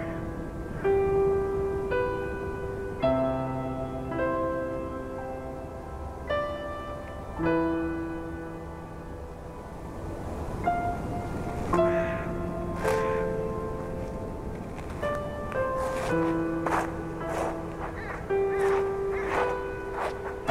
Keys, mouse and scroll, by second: 3.3 scroll down 1, 4.1 KP_7, 4.8-5.6 scroll down 5, 5.6 scroll up 3, 6.6-7.8 shift+middle drag, 7.8 Tab, 8.0-8.5 scroll up 1, 8.5 a, 8.8 a, 8.9 scroll down 2, 9.4 shift+middle click, 10.3 a, 10.6 a, 12.4 z, 12.9 b, 14.5 z, 14.8-16.3 scroll up 3, 16.3-16.8 scroll down 1, 16.8 g, 20.3 scroll down 2, 20.4 a.